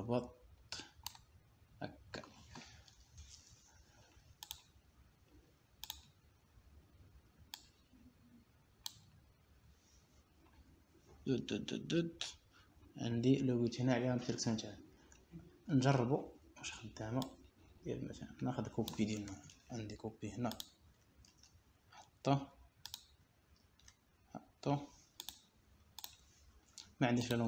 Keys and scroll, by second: 22.1 ctrl+c, 23.9 ctrl+v, 26.4 ctrl+v.